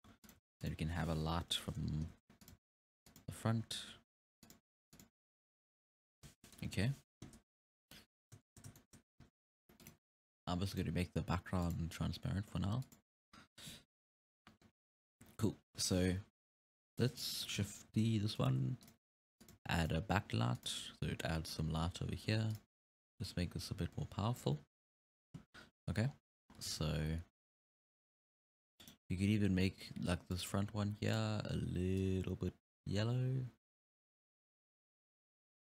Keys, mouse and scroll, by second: 0.0 g, 0.4 r, 1.5 KP_7, 2.1 r, 2.6 g, 3.5 g, 4.8 r, 6.7 KP_3, 7.8-8.2 scroll up 1, 8.2-8.8 scroll down 1, 8.8-9.8 shift+middle drag, 9.8 click, 10.7 click, 11.6-12.9 drag, 13.9-14.3 scroll up 1, 15.4-16.4 scroll down 3, 16.7 KP_3, 17.1 right click, 17.9-20.4 typing, 22.5 click, 23.3-25.1 drag, 25.1-25.7 scroll up 4, 26.1 scroll down 5, 26.5 scroll up 2, 26.7 alt+a, 27.0-27.4 scroll down 1, 27.4 scroll up 1, 28.8-29.3 scroll up 1, 30.3 right click, 31.1 click.